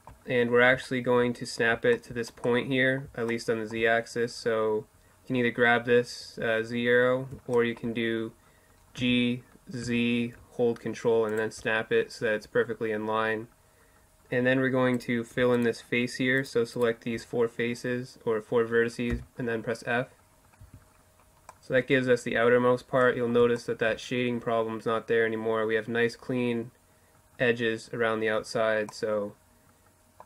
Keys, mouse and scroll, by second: 1.5-4.3 middle drag, 8.0 g, 8.9-11.1 middle drag, 12.4-14.1 middle drag, 14.1-17.7 right drag, 18.1 f, 19.4 middle click, 19.6 Tab, 25.6-27.9 middle drag.